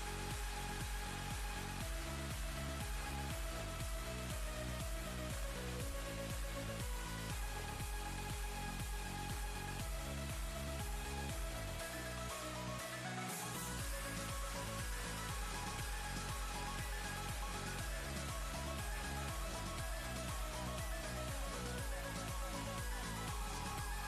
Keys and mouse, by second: 1.1 ctrl+space, 1.3 ctrl+click, 1.6-2.5 ctrl+space, 4.9 click, 7.4 right click, 9.4 click, 10.4 alt+Tab, 11.5 click, 11.6 click, 14.5 ctrl+v, 14.9 space, 15.3-15.6 drag, 15.4 space, 17.0 click, 17.4 space, 18.2-20.4 drag, 22.0 click, 23.6 click.